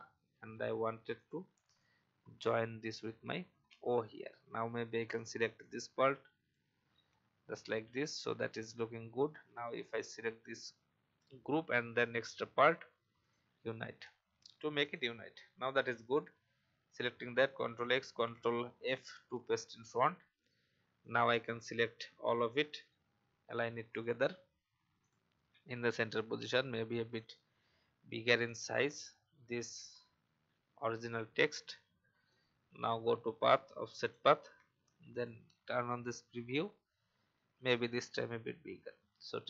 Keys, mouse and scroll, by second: 3.5 v, 5.1-6.8 drag, 7.1-7.4 alt+scroll down 1, 7.7 typing, 10.0 shift+click, 14.1-14.4 alt+scroll down 1, 14.8 click, 17.4 ctrl+x, 18.1 ctrl+f, 19.3 alt+scroll down 1, 19.9 scroll up 1, 20.4 click, 26.1-28.1 alt+shift+drag, 31.0 alt+scroll up 1, 32.2-36.2 drag, 37.3 shift+scroll up 1.